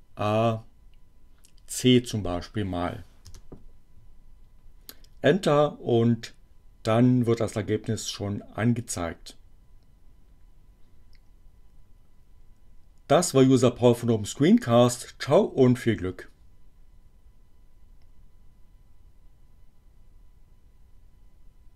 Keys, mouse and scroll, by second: 3.1 Return.